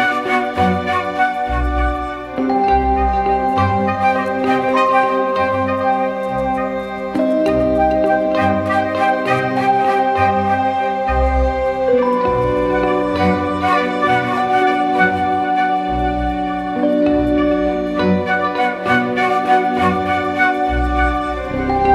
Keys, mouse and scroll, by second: 20.8 double click.